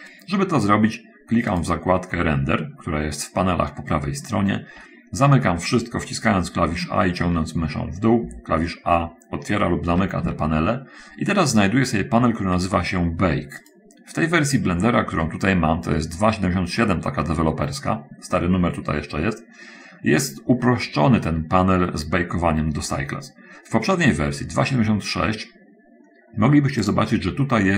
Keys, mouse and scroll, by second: 1.9 click, 7.1 a, 7.4 a, 8.6 a, 10.3 a, 10.6 a, 27.2 click.